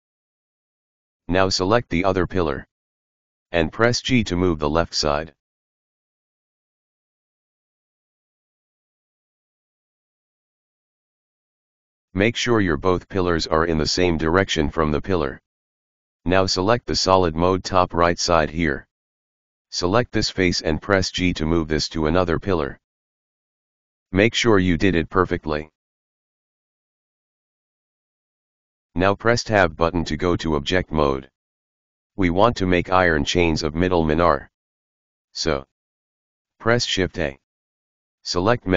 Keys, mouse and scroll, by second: 0.0-0.9 scroll down 1, 0.9 click, 4.7 g, 8.4 KP_Decimal, 9.3 scroll up 3, 11.2 g, 13.4-14.8 scroll down 4, 14.8-17.7 middle drag, 17.7 click, 18.2-19.4 middle drag, 19.4 right click, 20.1-21.6 middle drag, 21.6 g, 24.1 KP_Decimal, 26.0 right click, 26.8 KP_1, 27.6-29.0 scroll down 15, 29.9 Tab, 30.7-31.8 scroll down 1, 35.6 click.